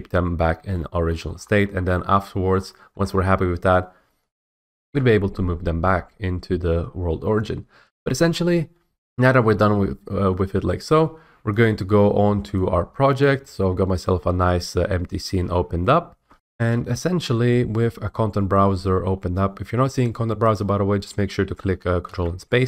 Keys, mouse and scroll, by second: 1.1 shift+middle click, 1.3 scroll, 1.3 middle click, 1.5 middle click, 2.4 shift+middle click, 2.6-3.0 scroll, 2.9 shift+middle click, 4.4 F8, 4.5 F8, 11.8 click, 13.2 click, 14.2-14.8 typing, 15.7 right click, 16.3 F8, 20.5 click, 22.0 ctrl+space.